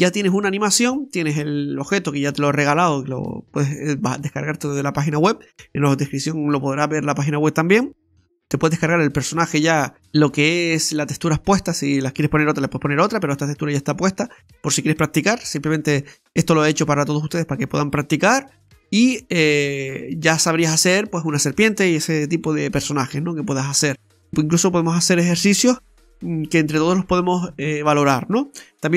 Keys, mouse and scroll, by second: 1.9 right click, 11.5-12.0 scroll up 2, 12.3 scroll up 2, 12.3 middle click, 13.3 scroll down 2, 13.6 middle click, 15.6 middle click, 18.5-18.8 scroll down 2, 18.7 middle click, 19.1-19.9 scroll up 1, 23.4 scroll down 2, 23.7 middle click.